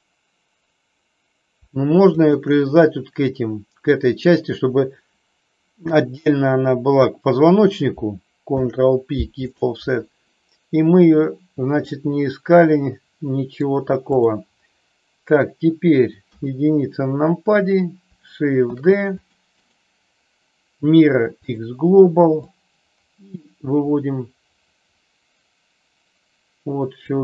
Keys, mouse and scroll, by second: 2.2 shift+click, 8.4 ctrl+p, 11.8-13.7 middle drag, 16.1 KP_1, 18.5 shift+d, 19.8-21.5 right drag, 22.4-27.0 drag.